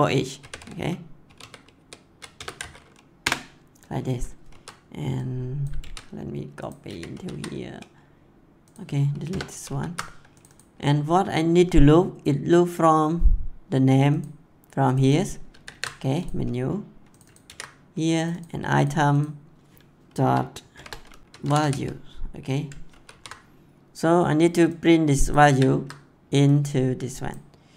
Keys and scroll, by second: 0.0-0.9 typing, 2.3 BackSpace, 2.4 c, 3.1 Return, 4.4 ctrl+s, 5.8 ctrl+x, 9.2 BackSpace, 9.4 ctrl+s, 15.5 ctrl+c, 17.4 ctrl+v, 20.2 =, 20.7 shift+., 21.3 a, 22.9 ctrl+s, 25.4 ctrl+c.